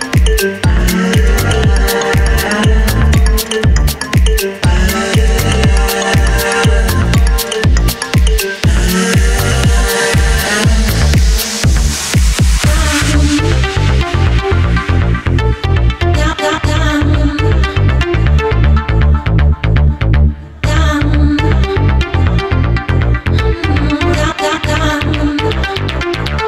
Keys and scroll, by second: 6.7 Up.